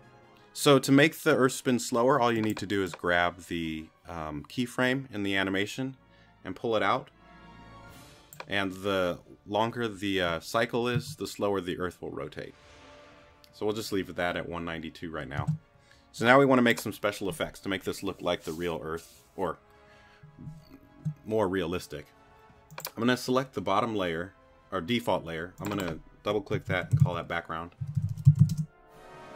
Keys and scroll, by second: 15.5 space, 26.3-28.9 typing.